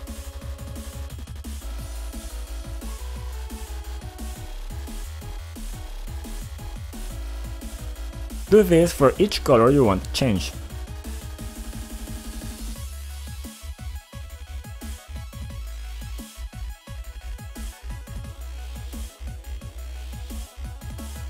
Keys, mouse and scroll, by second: 1.4 click, 4.0 typing, 4.3 Return, 5.0 click, 5.6-7.1 typing, 7.4 scroll down 2, 8.2 click, 8.4 click, 11.3 click, 13.3 click, 14.5 click, 15.3-19.4 typing, 17.8 click, 20.2 click, 20.6 click.